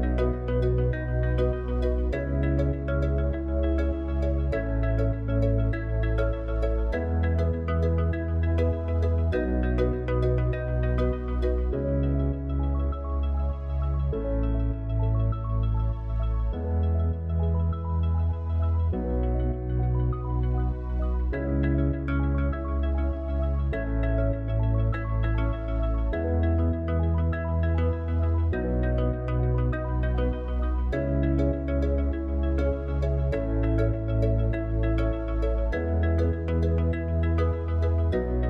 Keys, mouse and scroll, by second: 4.2 click, 6.2 click, 8.9 KP_1, 11.4 click, 12.2-13.2 scroll down 8, 13.2 scroll up 6, 16.8 s, 20.4 s, 22.3-24.6 middle drag, 24.6 click, 25.6 click, 28.7 Tab, 29.5-30.2 scroll up 1, 30.7 ctrl+r, 36.6 click.